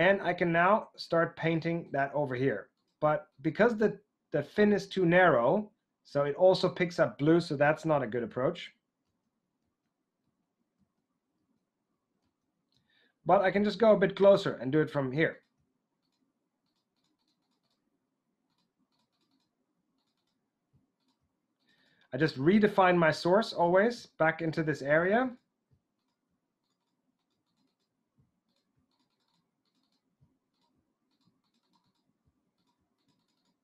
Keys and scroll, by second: 7.7 super+z, 8.3 super+z, 12.2 super+z.